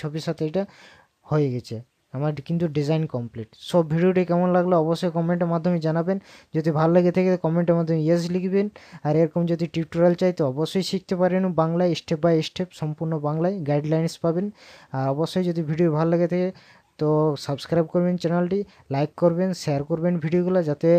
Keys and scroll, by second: 1.6 ctrl+KP_Add, 2.6 ctrl+KP_Subtract.